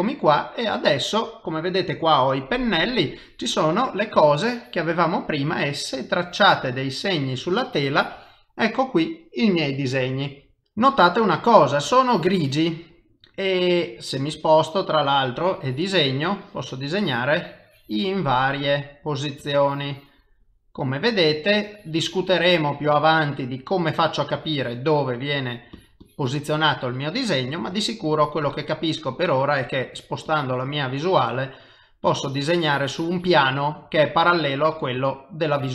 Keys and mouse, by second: 3.2 click, 4.1 click, 5.2 click, 6.0 click, 7.5 click, 11.9 click, 13.3 middle click, 15.5 click, 16.4 click, 18.4 middle click, 19.4 click, 20.5 middle click, 21.6 click, 23.0 middle click, 24.4 click, 25.4 click, 25.8 click, 26.0 click, 26.7 middle click, 27.8 click, 28.1 click, 28.5 click, 28.9 middle click, 29.9 click, 30.3 click, 30.6 click, 31.0 middle click, 32.1 click, 33.6 middle click, 35.4 click.